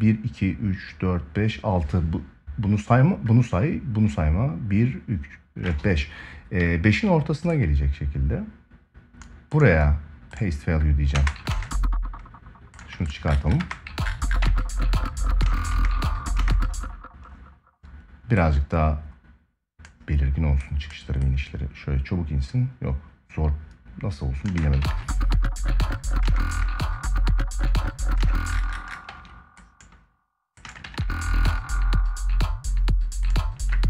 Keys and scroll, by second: 10.9 space, 13.4 ctrl+space, 15.2 space, 24.2 space, 24.5 ctrl+s, 25.9 space, 27.9 space, 28.8 ctrl+s, 30.4 space, 30.5 ctrl+s.